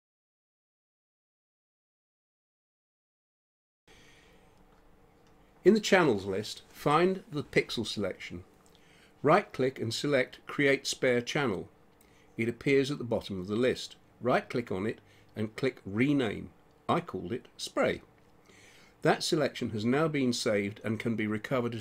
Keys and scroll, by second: 17.6-19.7 typing.